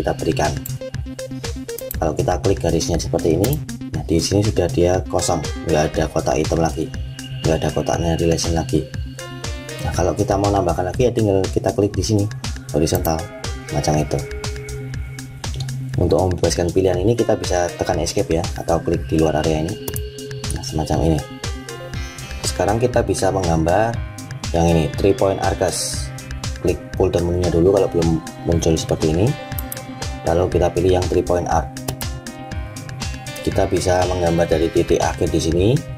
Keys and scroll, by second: 17.9 Escape.